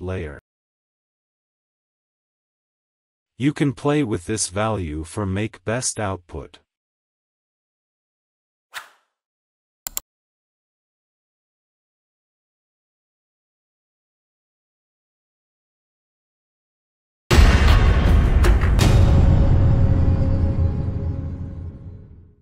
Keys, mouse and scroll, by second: 4.6-10.1 drag, 10.1 click.